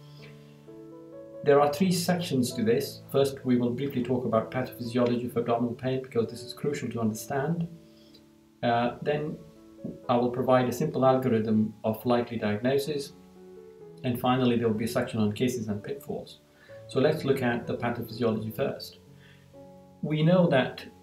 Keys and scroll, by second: 8.0 Down, 12.7 Down, 17.0 Down.